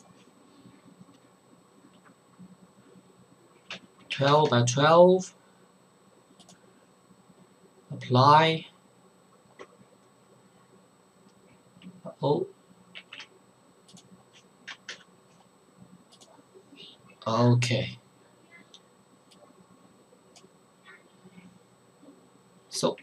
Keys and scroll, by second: 3.6 KP_1, 3.7 KP_2, 3.9 Tab, 4.1 KP_1, 4.3 KP_2, 12.9 ctrl+z, 14.9 BackSpace.